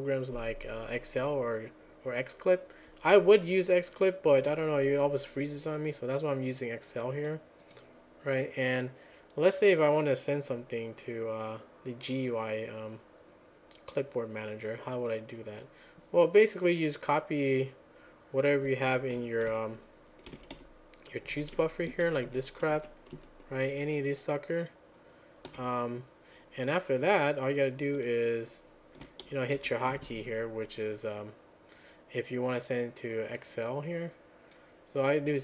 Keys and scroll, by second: 19.0 alt+j, 20.3 ctrl+a, 20.6 =, 21.9 Down, 22.3 Up, 22.7 Down, 23.1 Up, 25.5 q.